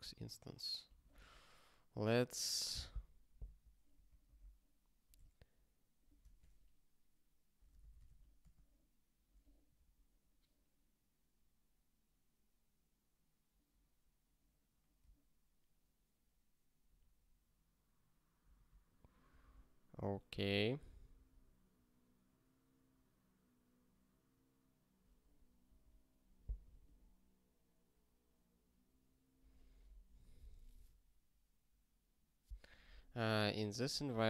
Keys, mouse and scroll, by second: 3.4 super+b, 4.3 super+t, 5.1 g, 6.2 BackSpace, 7.5-8.4 typing, 8.5 Return, 25.6 super+w.